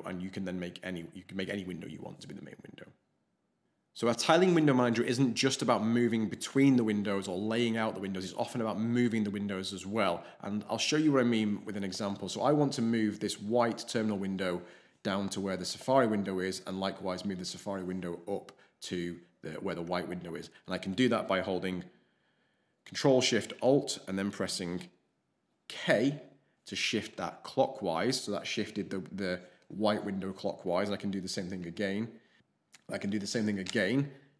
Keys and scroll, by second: 26.0 ctrl+alt+shift+k, 31.6 alt+shift+k, 33.6 ctrl+alt+shift+k.